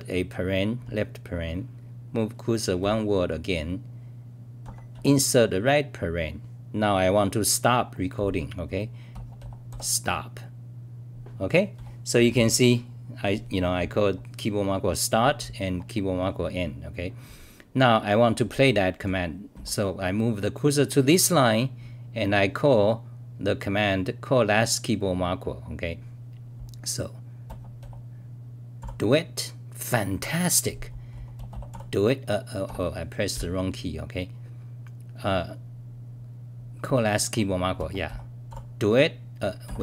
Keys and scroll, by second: 2.8 r, 11.7 w, 19.0 t, 19.5 d, 28.5-29.3 typing, 31.1 t, 32.6 ctrl+g, 33.3 ctrl+w, 38.2-39.8 typing.